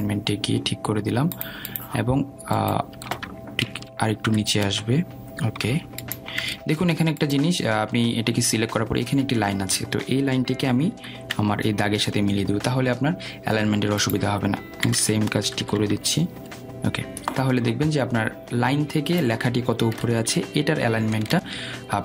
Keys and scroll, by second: 6.1 shift+Down, 13.3 Down.